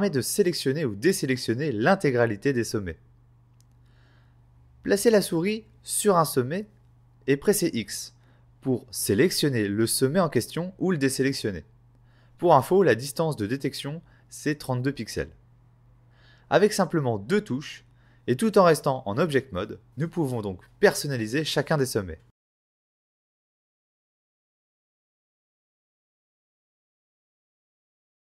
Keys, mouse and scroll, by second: 0.3 x, 1.3 x, 2.6-4.8 typing, 6.4 x, 9.3 x, 11.1 x, 12.1 x, 14.6-15.0 typing, 16.7 x, 17.6 middle click, 20.2 scroll down 3, 20.6 click, 21.4 click, 22.5 z, 24.2 right click, 24.8 middle click.